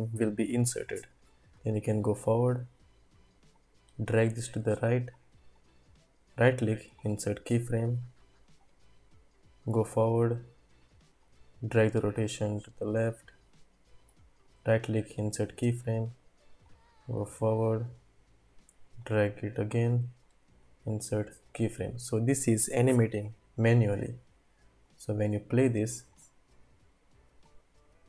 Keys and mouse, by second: 1.6 click, 3.6-5.1 drag, 5.5-7.4 drag, 8.6-10.1 drag, 11.3-14.0 drag, 14.5 click, 16.6-17.9 drag, 19.1-20.2 drag, 20.7 click, 24.9-25.3 drag, 26.2-27.0 drag.